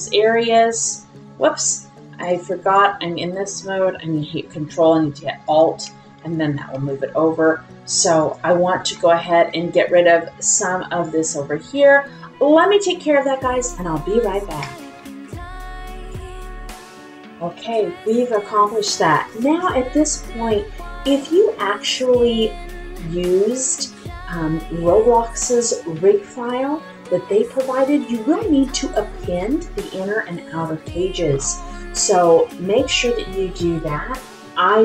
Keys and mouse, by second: 2.2-2.8 drag, 5.4 alt+click, 6.7 r, 10.6 click.